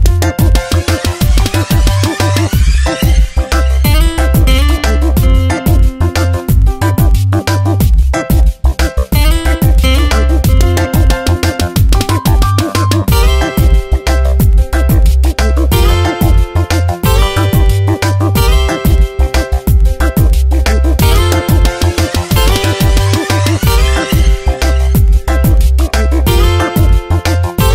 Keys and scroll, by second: 2.1 space, 5.7 space, 8.4 space, 14.8 space, 23.8 ctrl+z.